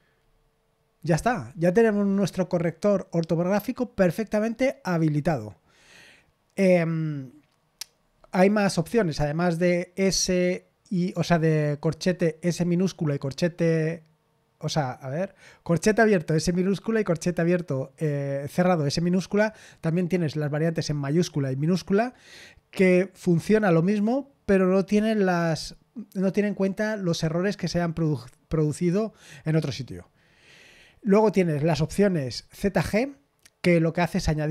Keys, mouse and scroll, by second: 2.1-4.0 scroll down 1, 4.0-5.7 scroll down 1, 5.7-7.8 scroll down 1, 7.8-12.0 scroll down 1, 12.0 scroll down 1.